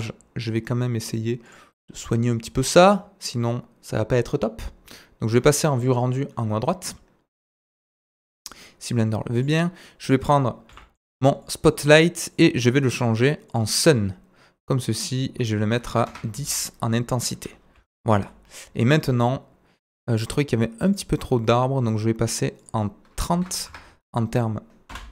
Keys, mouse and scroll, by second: 0.0-8.6 right drag, 7.6 click, 9.4 click, 10.7 g, 12.4-13.5 drag, 14.2 right click, 15.0 click, 17.8 z, 20.0-20.9 drag, 20.9-22.6 drag, 21.2-22.6 scroll down 5, 24.1-25.1 drag, 25.0 F12.